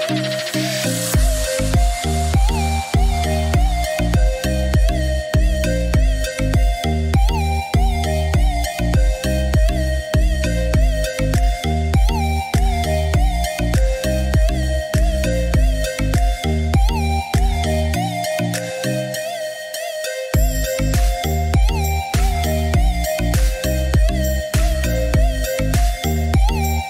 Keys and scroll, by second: 6.8 8, 8.0 7, 8.5 5, 8.8 Return, 15.2 5, 16.3 6, 16.5 Return, 24.8 8, 25.5 7, 26.3 5, 26.4 Return.